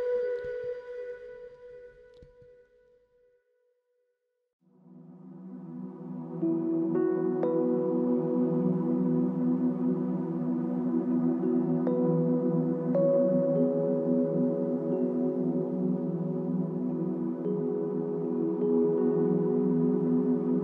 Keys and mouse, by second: 3.9 alt+click, 5.7 double click, 7.7 alt+click, 10.0 ctrl+click.